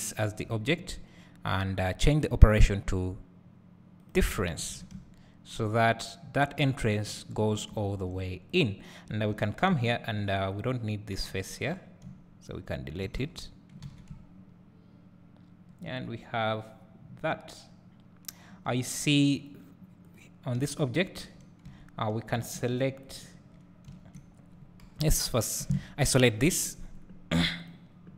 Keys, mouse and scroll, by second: 0.7 `, 4.2-8.6 drag, 4.9 a, 5.1 `, 7.6-7.9 scroll up 2, 7.9 `, 9.1 scroll up 1, 9.7 Tab, 10.1 `, 10.7 click, 11.7 x, 12.2 `, 13.4 Tab, 14.1 a, 14.3 `, 19.5 click, 20.2 click, 20.9 `, 21.7 Tab, 22.5 1, 23.2 alt+click, 23.9 `, 24.9 KP_7, 25.6 KP_Divide, 27.7 click.